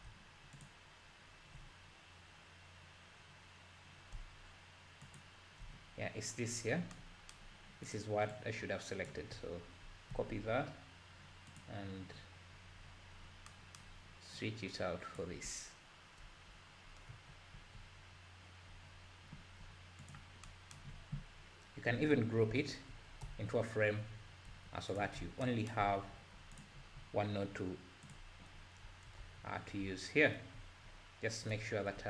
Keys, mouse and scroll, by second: 0.7 ctrl+shift+click, 1.9 scroll down 1, 2.8-3.4 scroll down 1, 3.4-4.7 scroll down 1, 5.2 ctrl+shift+click, 6.0-6.5 scroll up 2, 6.5-6.9 scroll down 6, 7.9 click, 8.3 drag, 10.1 ctrl+c, 11.5 click, 12.5-13.1 scroll down 6, 13.2 scroll up 3, 14.4-15.2 drag, 16.3 Delete, 17.6 ctrl+v, 19.3 g, 20.9-21.9 scroll up 8, 21.9-22.6 scroll down 1, 22.6 ctrl+g, 23.2 Tab, 24.5 g, 25.2 scroll up 4, 25.8 scroll up 3, 26.1 g, 26.8-28.1 scroll up 8, 28.1 click, 28.8 Tab, 29.2 Tab.